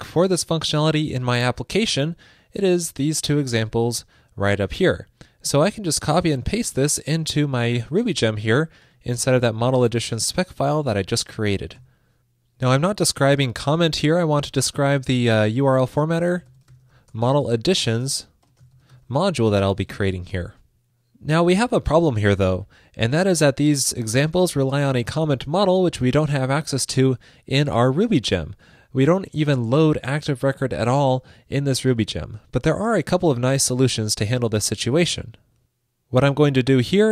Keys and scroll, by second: 7.3 super+c, 8.0 super+`, 10.5 super+v, 19.9 super+s.